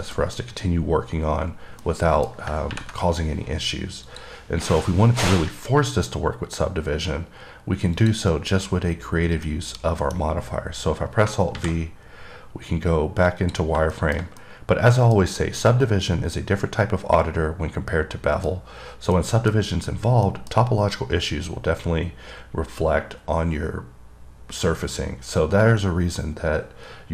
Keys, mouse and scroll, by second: 0.1 middle click, 0.4 double middle click, 1.7-2.1 scroll up 1, 2.1 middle click, 4.4 click, 9.2-9.7 scroll down 1, 9.7 middle click, 11.2 scroll down 1, 13.5 click, 14.2 middle click, 14.7 middle click, 15.5 scroll up 3, 15.9 middle click, 16.4 scroll down 1, 19.4 middle click, 20.5 middle click.